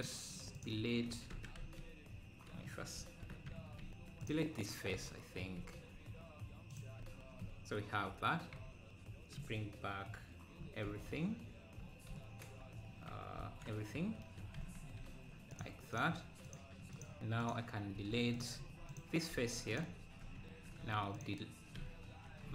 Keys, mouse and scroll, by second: 0.0 click, 0.6 click, 1.3 Tab, 1.7 z, 3.0 shift+h, 3.5 Tab, 4.3 click, 6.7 click, 7.0 Tab, 8.5 KP_Divide, 8.8 KP_Divide, 9.5 KP_Divide, 13.4 alt+h, 14.7 z, 15.6 click, 16.0 click, 16.5 click, 17.0 click, 17.5 click, 18.1 z, 18.6 Tab, 19.0 click, 19.8 x, 20.0 Tab, 20.1 Tab, 20.8 Tab, 21.7 click.